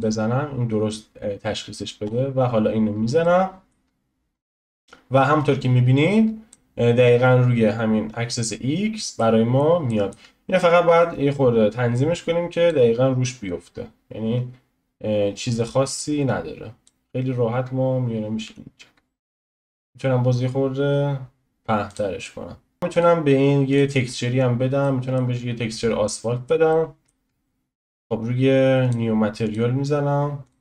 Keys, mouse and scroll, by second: 2.1-3.2 drag, 3.2 middle click, 3.9-4.7 scroll down 2, 4.7 click, 9.2-11.0 middle drag, 11.0 click, 13.5 click, 18.5 s, 22.2-22.9 middle drag, 22.9 click, 23.8 click, 24.0-24.5 scroll up 3, 24.5 scroll down 1, 24.8-29.5 shift+middle drag, 29.5-30.6 drag.